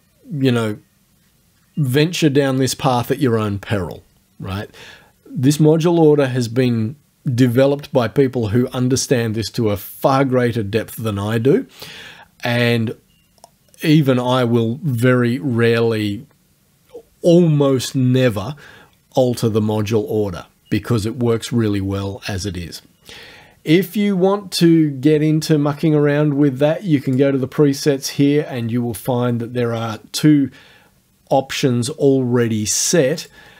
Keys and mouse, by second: 27.1 click, 33.2 click.